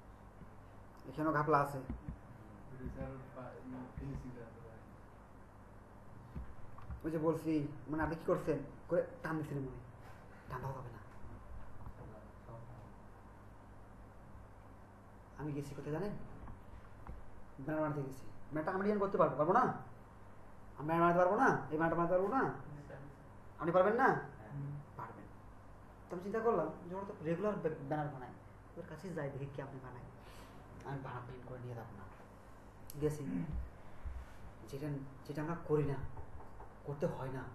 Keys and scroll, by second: 2.0 Right.